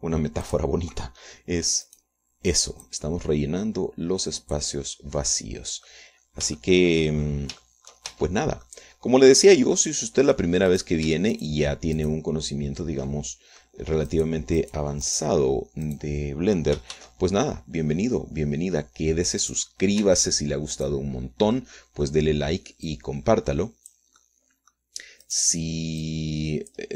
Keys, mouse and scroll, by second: 1.1 r, 1.8 click, 3.2 click, 4.3-6.2 drag, 6.3 scroll down 1, 6.7 click, 7.4 middle click, 7.6 scroll down 1, 7.8 shift+middle click, 8.0 shift+click, 8.5 shift+middle click, 9.0 shift+click, 9.5 shift+Tab, 10.0 shift+click, 11.2 click, 12.1 right click, 12.7 shift+right click, 13.4 shift+middle click, 14.5 shift+click, 15.5 right click, 16.4 right click, 17.2 right click, 18.3 shift+d, 20.8 click, 21.4 Tab, 22.2 click, 23.0-26.3 drag, 26.6 click.